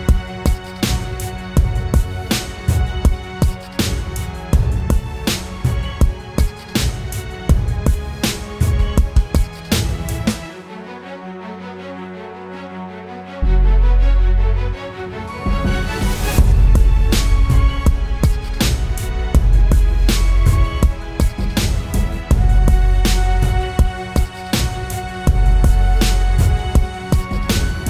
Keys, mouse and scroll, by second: 13.9 double click.